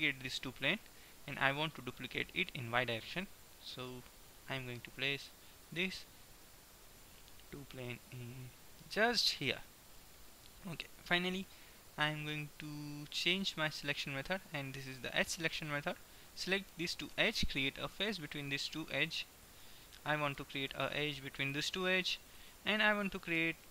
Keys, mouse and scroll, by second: 6.7 middle click, 12.3-14.2 drag, 14.2-15.7 middle drag, 15.7-21.2 right drag, 17.8 f, 20.3 f, 21.3-23.7 right drag.